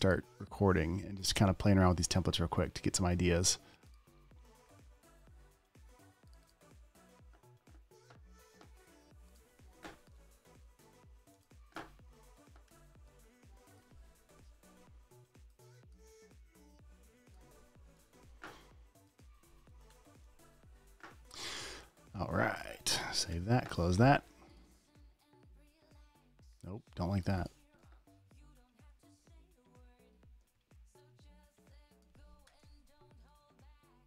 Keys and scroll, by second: 13.1 super+t, 18.3 alt+shift+v, 20.1 alt+shift+super+v, 20.2 super+BackSpace, 20.6 v, 23.3 super+s, 23.7 super+w, 28.9 super+t, 32.8 Return, 32.9 v.